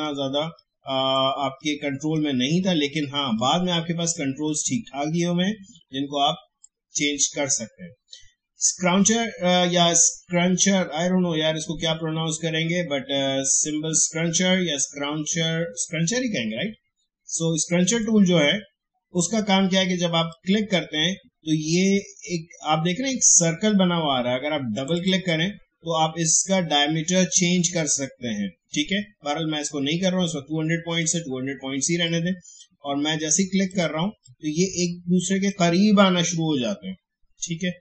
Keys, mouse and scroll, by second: 20.3-24.2 drag, 24.7 click, 29.6-37.8 drag.